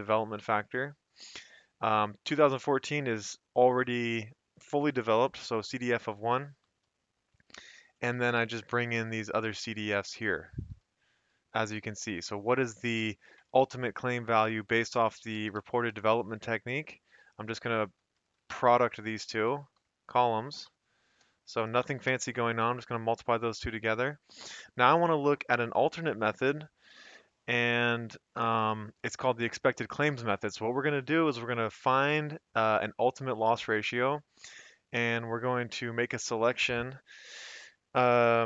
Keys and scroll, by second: 0.0 F2, 0.0 Escape, 0.2 Down, 0.7 Escape, 1.4 Up, 1.6 Up, 6.1 F2, 6.4 Escape, 6.7 Down, 6.9 F2, 7.8 Escape, 8.1 F2, 8.4 Escape, 8.7 F2, 9.0 Escape, 9.2 Down, 9.6 Escape, 9.8 Down, 9.8 F2, 10.5 Escape, 10.7 Down, 11.3 Escape, 11.8 Up, 12.0 Up, 12.2 Up, 12.4 Up, 12.8 Up, 13.1 Right, 14.8-16.4 typing, 16.7 Left, 17.5 shift+Left, 18.1 Return, 18.6 Up, 19.2 ctrl+c, 19.3 Left, 19.7 ctrl+Down, 20.2 Right, 20.6 ctrl+shift+Up, 21.3-22.5 typing, 23.8 Escape.